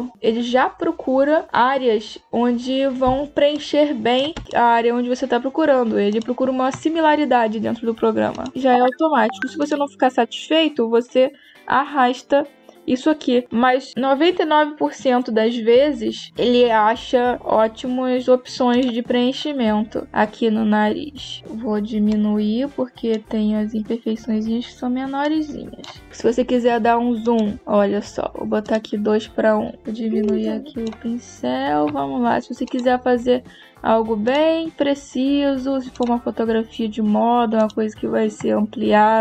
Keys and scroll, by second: 2.9 space.